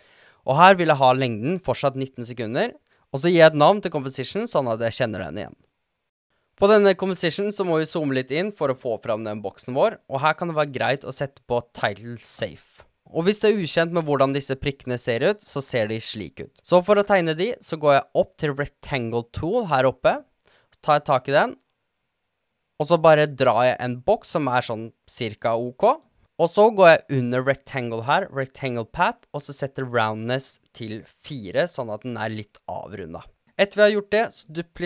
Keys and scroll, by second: 3.7-6.3 typing, 30.2 4, 30.4 Return.